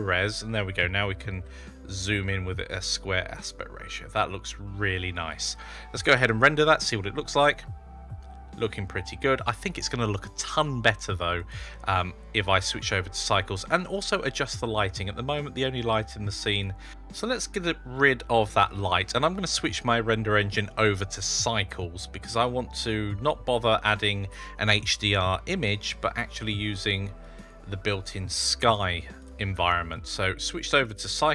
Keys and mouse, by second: 1.2 shift+`, 6.1 F12, 16.4 click, 16.8 click, 17.3 click, 18.0-18.6 typing, 21.3 click, 26.7 click, 27.2-29.2 drag, 30.8-31.3 drag.